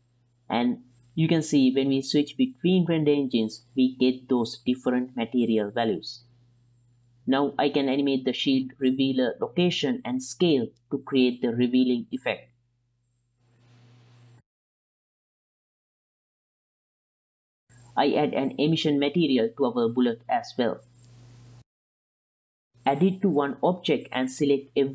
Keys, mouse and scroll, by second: 0.0 ctrl+c, 0.1 ctrl+v, 0.6 middle click, 1.3 click, 1.9-2.9 drag, 7.1 click, 7.1 middle click, 7.5 s, 7.8 g, 8.4 i, 8.7 drag, 9.2 click, 9.6 g, 10.5 KP_7, 10.7 z, 11.2 g, 12.2 i, 12.5-14.7 drag, 15.2 Right, 15.9-17.2 drag, 17.9 click, 18.2 click, 18.7 click, 19.3 drag, 19.7 click, 20.7 click, 23.7-24.9 drag.